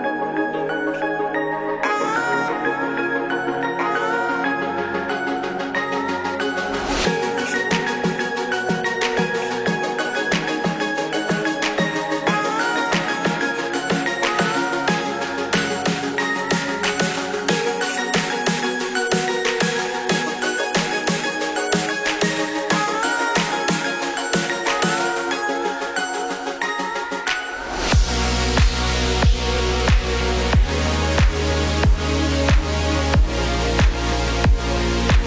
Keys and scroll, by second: 5.7 ctrl+=.